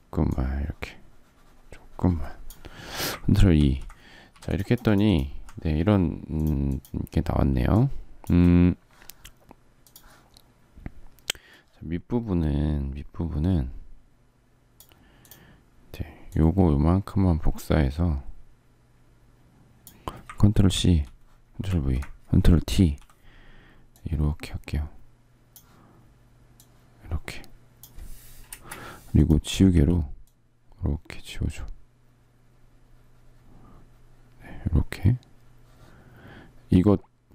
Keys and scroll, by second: 3.3 ctrl+e, 4.0 ctrl+z, 7.3 space, 7.8 space, 20.5 ctrl+c, 21.4 ctrl+v, 22.4 ctrl+t, 28.2 Return, 29.4 e.